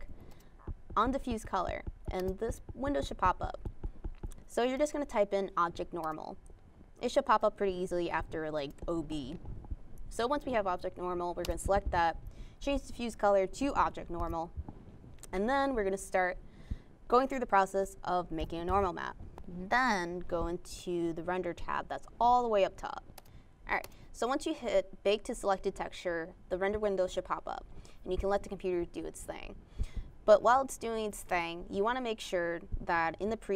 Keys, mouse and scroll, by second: 1.6-3.3 typing, 3.9 Return, 8.4 click, 9.6 click, 10.8 click, 12.4 click, 14.3 click, 20.6 click.